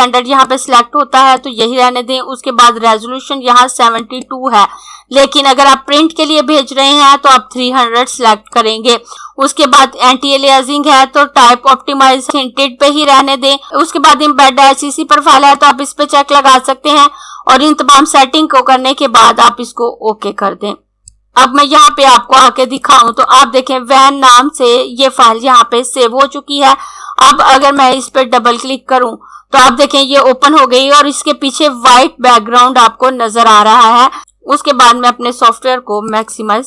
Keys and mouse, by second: 0.4 click, 7.8 click, 13.0 click, 15.6 click, 19.0 click, 27.2 click, 36.0 click.